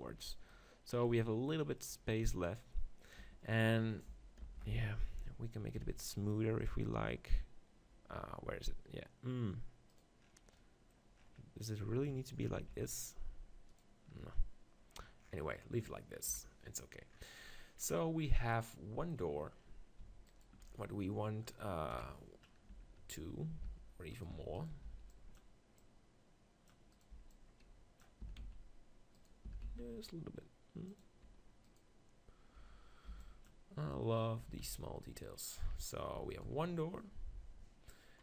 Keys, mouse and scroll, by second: 2.5 right click, 3.2 Tab, 4.4 ctrl+l, 5.4-7.6 middle drag, 5.6 ctrl+b, 5.8 ctrl+b, 10.0-12.0 right drag, 10.6-12.5 middle drag, 12.5 ctrl+b, 14.2 Tab, 16.3 KP_1, 20.3-21.4 right drag, 22.0 KP_1, 22.2-24.1 middle drag, 22.7 Tab, 23.0 z, 23.7 Tab, 24.1-25.8 drag, 24.3 Tab, 24.9 b, 26.5 click, 27.1 b, 28.3 s, 29.5 s, 30.5 right click, 31.0-33.0 drag, 31.6-33.4 right drag, 33.1 b, 34.4 Tab, 34.7 z, 36.5 right click.